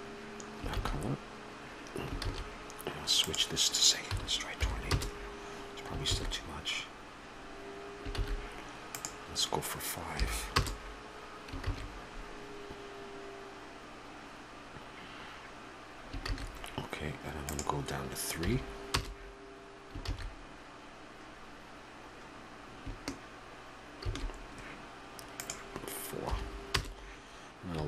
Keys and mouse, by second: 6.3 shift+z, 8.3 shift+z, 12.1 shift+z.